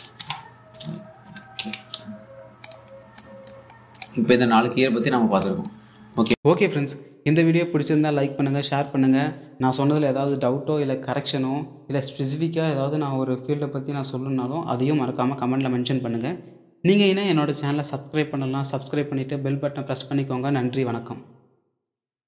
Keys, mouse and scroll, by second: 0.9 Tab, 1.2-2.7 typing, 3.3 click, 5.5-6.0 scroll up 1, 6.1 alt+click, 6.1 typing.